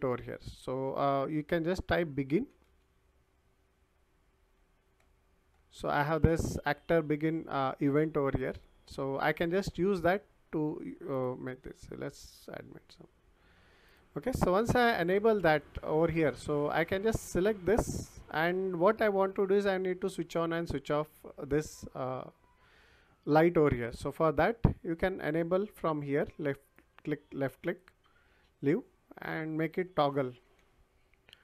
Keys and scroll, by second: 2.3 b, 29.6-30.6 typing.